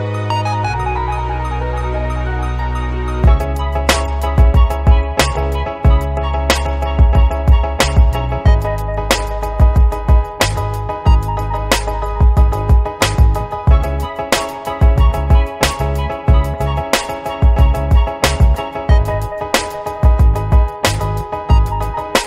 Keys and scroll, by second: 1.3-4.1 typing, 5.3-6.4 typing, 6.8 Left, 6.9 Left, 7.1 Left, 7.3 Left, 7.5 Left, 8.6-11.2 typing, 13.0 Return.